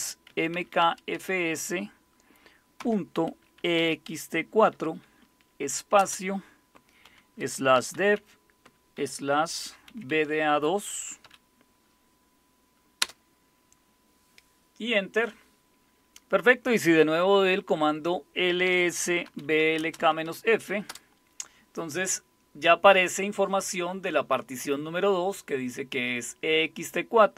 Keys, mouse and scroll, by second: 0.3-1.1 typing, 2.8-4.6 typing, 6.0 typing, 7.1-11.2 typing, 13.0 typing, 18.4-20.8 typing, 20.9 Return.